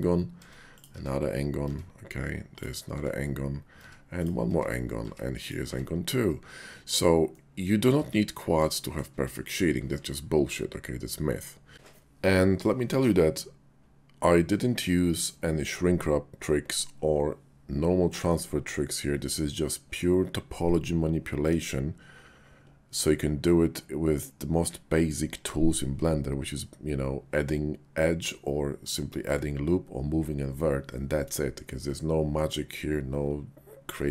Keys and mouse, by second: 0.3 Tab, 0.7 click, 0.9 Tab, 1.6 Tab, 2.9 Tab, 3.7 Tab, 4.1 click, 4.5 Tab, 5.0 Tab, 5.4 click, 5.6 Tab, 7.3 click, 8.0 Tab, 8.7 shift+drag.